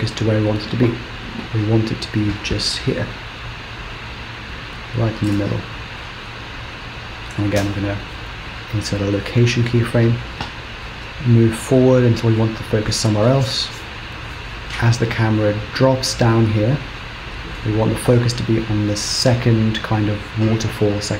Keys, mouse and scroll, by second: 0.2 middle click, 1.4 KP_3, 1.6 g, 3.1 KP_1, 4.6 g, 6.3 KP_0, 7.7 i, 9.6-10.0 scroll down 2, 11.5 click.